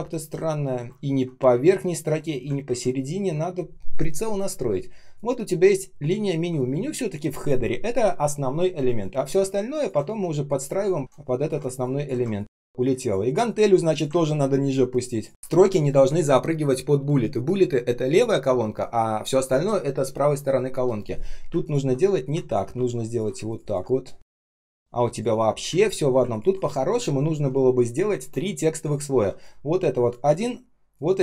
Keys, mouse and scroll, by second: 0.9 ctrl+scroll up 1, 2.6 ctrl+z, 2.8 ctrl+scroll down 1, 12.2 ctrl+click, 14.2 ctrl+click, 15.6 ctrl+scroll down 1, 21.5 ctrl+click, 23.4 ctrl+click, 23.5 ctrl+click, 25.6 Delete, 26.2 ctrl+click.